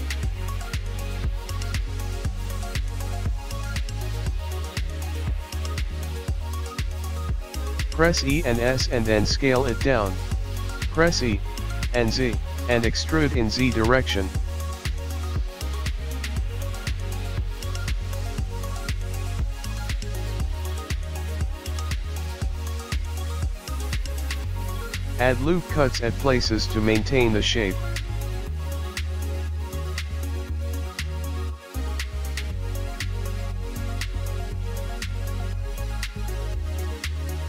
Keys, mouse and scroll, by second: 1.9 Tab, 2.8 click, 4.6 click, 5.5 click, 7.0 e, 8.8 g, 17.5 ctrl+r, 18.8 click, 19.2 click, 19.6 click, 19.9 click, 21.0 e, 22.2 g, 24.2 ctrl+r, 26.1-27.6 scroll up 7, 26.3 shift+middle click, 27.0 shift+middle click, 27.8 ctrl+r, 29.6 g, 31.5 ctrl+r, 33.5 ctrl+r, 35.8 click, 36.0-36.8 scroll down 5, 36.1 middle click, 36.8-37.4 shift+scroll up 7, 37.0 shift+middle click.